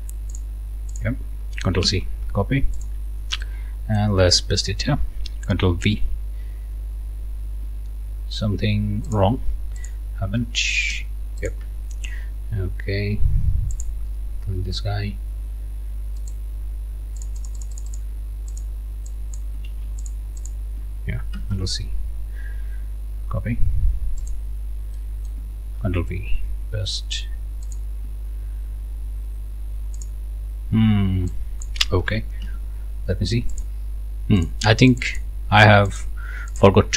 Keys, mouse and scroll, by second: 0.3 click, 0.9 click, 1.8 ctrl+c, 2.8 click, 3.5 click, 4.1 scroll down 2, 5.8 ctrl+v, 8.0-8.5 ctrl+scroll up 4, 9.8 click, 10.9 Delete, 11.4 click, 13.7 click, 16.2 click, 17.2 click, 18.5 click, 19.1 click, 19.7 ctrl+z, 20.0 ctrl+click, 20.5 ctrl+click, 21.3 ctrl+c, 24.2-25.5 drag, 25.8 ctrl+v, 27.7 click, 28.3-28.6 ctrl+scroll up 1, 29.1-29.5 ctrl+scroll up 3, 30.0 click, 31.3 click, 32.4 Delete, 33.6 click, 34.4 click, 34.9 click, 35.9 click, 36.5 click.